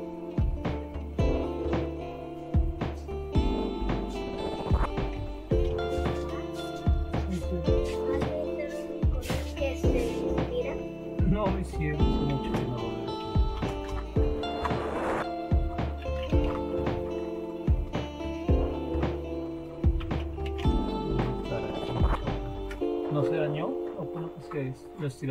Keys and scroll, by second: 1.9-2.7 scroll down 1, 2.7-3.7 scroll down 1, 4.9-6.3 typing, 11.4-14.0 typing, 15.8-17.7 typing, 19.3-23.2 typing.